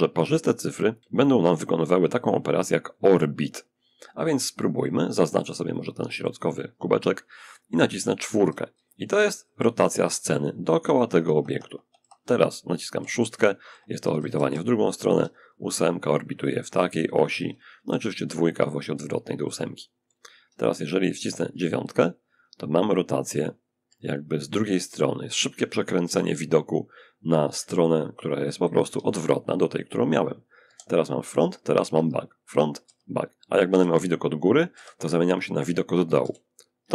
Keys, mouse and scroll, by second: 4.1-6.8 drag, 5.0-6.8 middle drag, 7.6 4, 8.0 4, 8.2 4, 10.2 6, 10.4 6, 10.6 6, 13.4-14.8 typing, 17.0 2, 17.2 2, 18.6 2, 19.8 8, 20.8 9, 22.4 9, 23.1 9, 23.8 9, 25.3 9, 26.8 9, 28.2 1, 29.9 9, 31.2 9, 33.0 7, 34.0 9, 35.5 9, 36.1 9, 36.7 9.